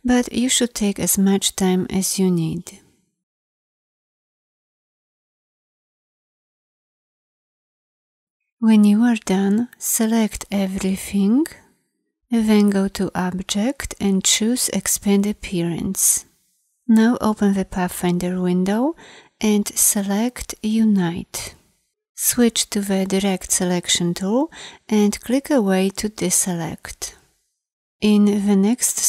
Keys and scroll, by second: 23.0 a.